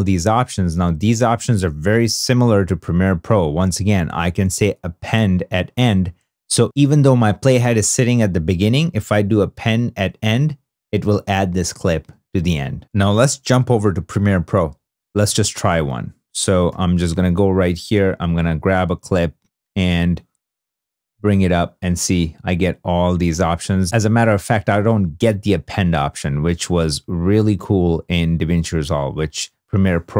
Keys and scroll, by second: 13.1 super+Tab, 16.5 -.